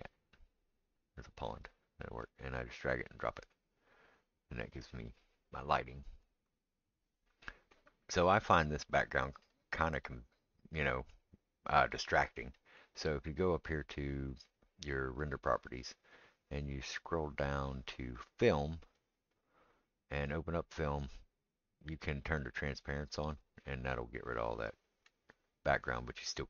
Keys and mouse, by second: 1.4 click, 1.6-26.4 right drag, 1.6 click, 2.2 click, 15.2 click, 18.8-22.9 drag, 19.9-24.5 middle drag.